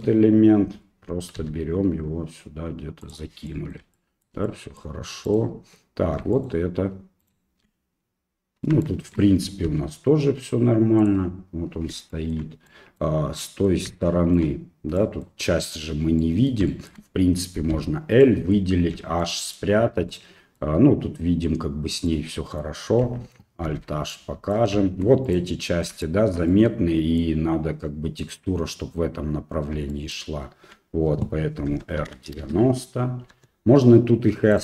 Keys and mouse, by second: 1.4 g, 3.5 middle click, 4.0 shift+middle click, 4.5 middle click, 5.3 right click, 6.3 shift+right click, 7.2 shift+right click, 8.9 shift+click, 9.7 g, 12.3 middle click, 12.7 middle click, 13.5 middle click, 14.0 shift+middle click, 15.0 middle click, 16.2 middle click, 16.7 shift+middle click, 17.7 l, 18.2 middle click, 18.9 h, 19.2 middle click, 20.1 middle click, 22.1 middle click, 23.7 alt+h, 24.1 middle click, 25.3 right click, 26.1 shift+middle click, 26.5 middle click, 30.0 shift+middle click, 31.7 r, 33.3 g.